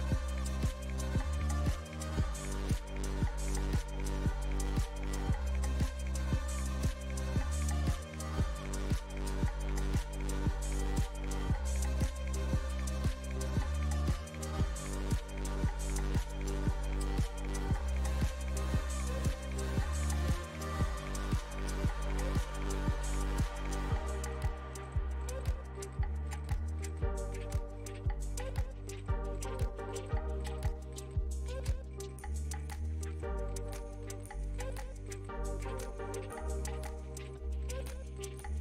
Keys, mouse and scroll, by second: 1.9 middle click, 2.4 ctrl+click, 3.1 middle click, 3.8-6.8 ctrl+drag, 7.5 middle click, 8.2-11.3 drag, 12.6 middle click, 13.6-15.4 drag, 15.4-16.6 middle drag, 16.6-18.0 drag, 18.0 middle click, 18.4-20.6 ctrl+drag, 20.6 middle click, 21.6-24.6 drag, 25.5-26.8 middle drag, 26.8-29.1 drag, 29.1 shift+c, 29.7-31.2 ctrl+drag, 31.2 f, 32.4-38.0 ctrl+drag, 38.0-38.6 middle drag.